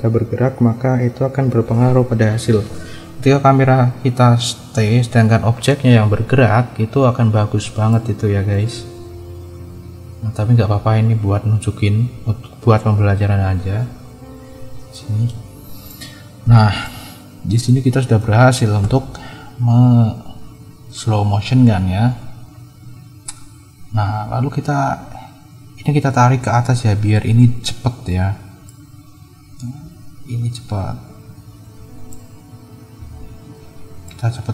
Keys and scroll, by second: 9.7 space, 12.0 space, 18.8 space, 24.1 space.